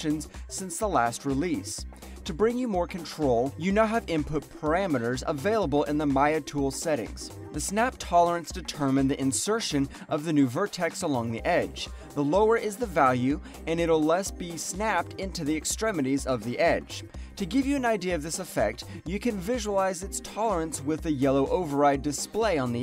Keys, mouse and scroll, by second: 3.4 alt+middle click, 3.6 alt+right click, 6.3 click, 7.8 click.